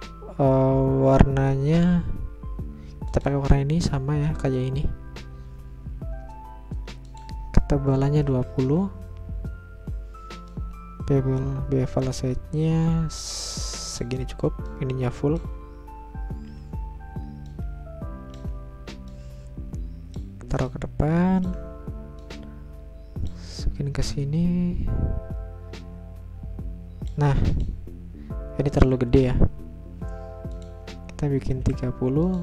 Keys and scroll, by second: 7.9-8.8 typing, 10.5 Return, 31.2-32.0 typing.